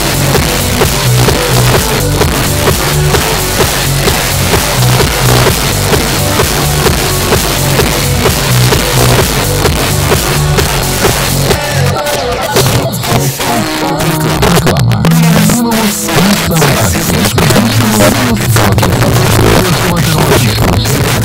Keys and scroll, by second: 16.8 space.